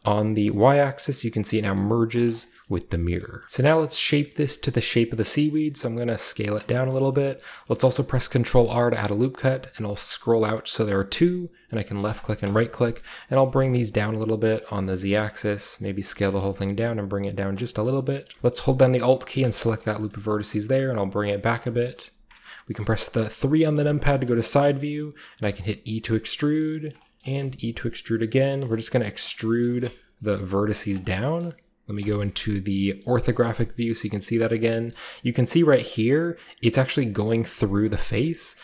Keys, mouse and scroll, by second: 0.8 click, 1.7 middle click, 2.1 click, 2.2 middle click, 2.3-3.4 scroll down 1, 3.4-4.5 scroll up 1, 3.4 typing, 3.5 middle click, 4.2 middle click, 4.5 middle click, 4.5-5.2 scroll down 1, 4.8 middle click, 5.2 s, 5.2-6.4 scroll up 1, 5.4-6.4 middle drag, 6.4 scroll up 1, 6.4 click, 7.3-9.0 scroll up 1, 7.7 ctrl+r, 10.3-12.0 scroll up 1, 12.0 click, 12.8-14.6 middle drag, 13.0-14.6 scroll up 1, 14.6 click, 14.6-16.3 typing, 16.0 click, 17.4 shift+click, 17.7-21.4 middle drag, 17.7-19.4 scroll up 1, 17.9 typing, 19.4-20.0 scroll up 1, 20.2 typing, 21.4 click, 23.2 KP_3, 24.3-25.4 scroll up 1, 25.4 e, 26.8 click, 27.4 e, 28.3 click, 28.6 click, 29.0 middle click, 29.0-31.0 scroll down 1, 29.3 middle click, 29.6-30.7 middle drag, 30.1 ., 30.9 middle click, 31.0-32.0 scroll up 1, 31.4-32.8 middle drag, 31.4-32.0 typing, 32.0-32.8 scroll up 1, 32.8 scroll up 1, 33.0 middle click, 34.0 middle click, 34.0-37.2 scroll up 1, 34.4 middle click, 34.6 shift+middle click, 34.9 shift+middle click, 35.7-37.2 shift+middle drag, 37.5 middle click, 38.2-38.6 middle drag.